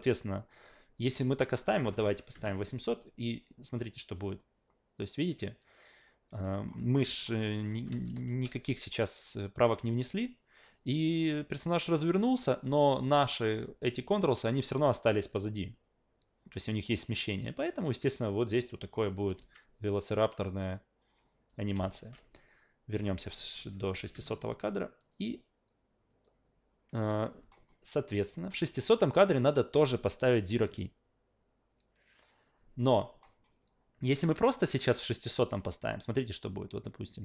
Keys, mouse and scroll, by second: 1.1 click, 3.4-6.7 drag, 7.4 alt+middle click, 10.7-12.3 drag, 12.6 w, 13.3 alt+middle click, 13.5 w, 14.1-14.7 drag, 14.9 ctrl+z, 15.8-18.9 drag, 19.2 alt+middle click, 21.7 alt+v, 22.9 click, 25.1-27.0 drag, 27.5 alt+middle drag.